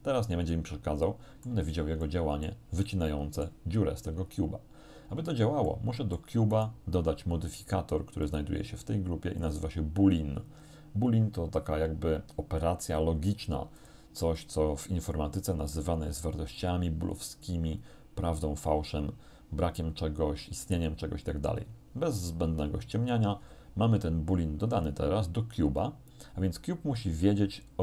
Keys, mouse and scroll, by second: 2.1 middle click, 2.9 middle click, 5.0-5.6 scroll down 3, 5.7 middle click, 6.6 right click, 8.3 click, 9.5 click, 13.8 click, 16.6 click.